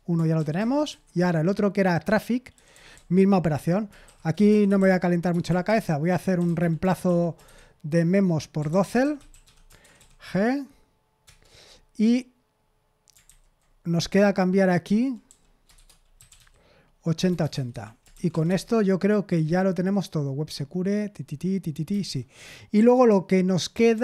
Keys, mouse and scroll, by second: 0.0-10.4 typing, 0.5 ctrl+w, 2.0 Return, 11.2 Return, 13.2 ctrl+n, 14.1-18.6 typing, 22.0 ctrl+n, 22.7 j.